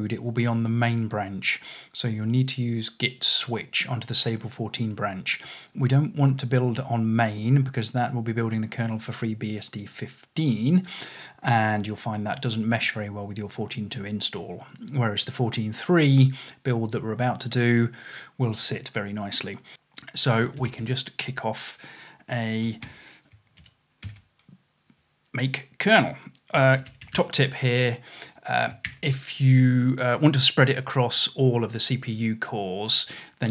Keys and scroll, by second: 19.7-21.2 typing, 22.4-24.1 typing, 26.4-27.7 typing, 28.9 shift+0, 29.1 space.